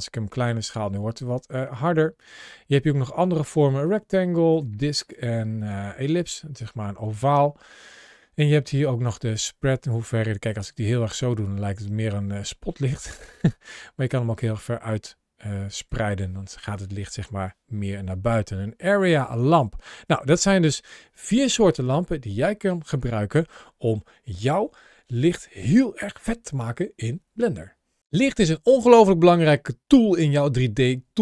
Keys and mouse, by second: 1.1 click, 2.5-3.4 drag, 3.6 click, 4.8-5.5 drag, 8.9-15.7 drag.